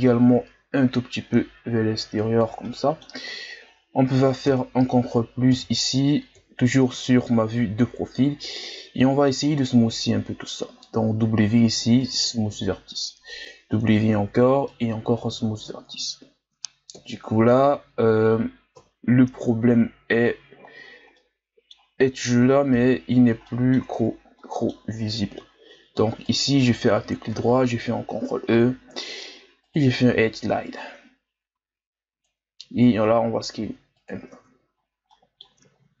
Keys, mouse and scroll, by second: 2.6-4.5 middle drag, 4.5 ctrl+KP_Add, 5.5 KP_1, 6.3 KP_3, 7.3-8.4 scroll up 1, 8.4 w, 10.8 w, 14.0 w, 15.4 Tab, 16.1-16.9 scroll down 2, 16.9 KP_1, 18.7 KP_3, 19.6 scroll up 2, 20.7-21.1 shift+scroll down 2, 21.1-22.9 middle drag, 22.9-23.5 shift+scroll down 1, 23.5 middle click, 23.8 Tab, 24.4-26.3 middle drag, 26.3 alt+right click, 27.3 ctrl+e, 32.6 s, 34.3 Tab, 34.8-35.1 scroll down 4, 35.1-36.0 middle drag.